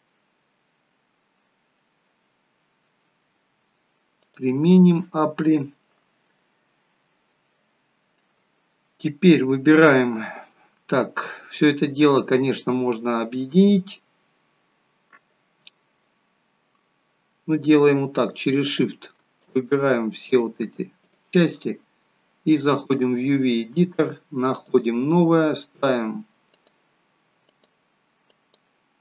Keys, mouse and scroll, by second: 4.1 click, 13.5-14.2 scroll up 1, 14.2-14.6 scroll down 1, 18.5 click, 19.6 shift+click, 20.2 shift+click, 20.9 shift+click.